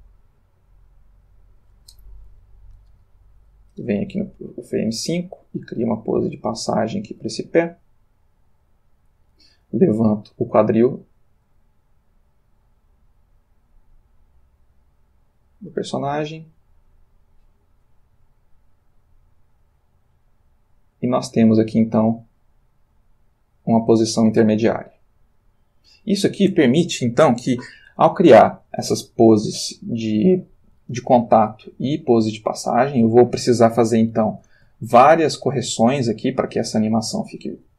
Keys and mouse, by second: 3.4 Left, 4.9 g, 6.4 click, 7.2 r, 9.5 click, 10.5 click, 11.4 Return, 11.6 g, 15.2 click, 16.8-26.2 drag, 29.0-30.0 ctrl+middle drag, 32.2-34.2 drag, 34.8 ctrl+middle click.